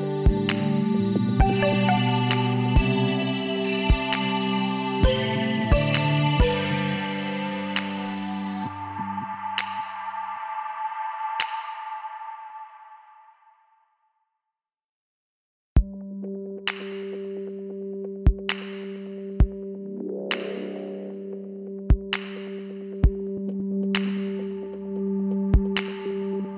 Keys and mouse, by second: 0.2 click, 6.2 KP_1, 7.3 middle click, 7.9 middle click, 9.3 middle click, 9.5 z, 10.2-13.3 drag, 10.6 b, 15.6 middle click, 16.4 z, 17.1 KP_1, 18.1 a, 18.4 a, 20.6 r, 24.7 g.